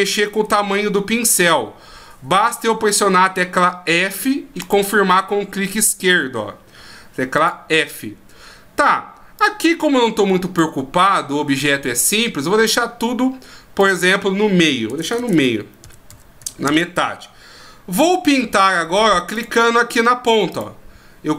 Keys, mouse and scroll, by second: 0.3 f, 4.7 click, 6.0 f, 7.4 click, 9.4 click, 13.8 click, 15.0 BackSpace, 15.1 BackSpace, 19.3 click, 20.5 click.